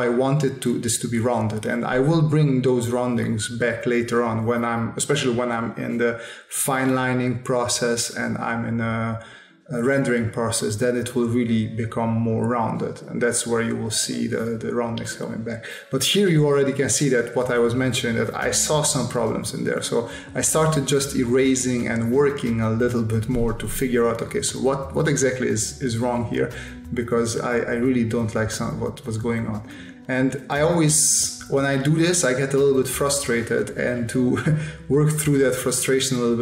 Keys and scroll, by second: 1.7 s, 3.2 space, 3.9 s, 8.0 space, 9.8 s, 11.4 s, 12.6 s, 13.8 s, 15.4 space, 18.0 space, 18.3 s, 19.4 s, 20.3 space, 21.1 s, 21.6 space, 22.8 s, 24.5 space, 27.1 space, 29.1 space, 30.9 space, 31.9 space, 33.7 space, 34.7 space, 35.9 space.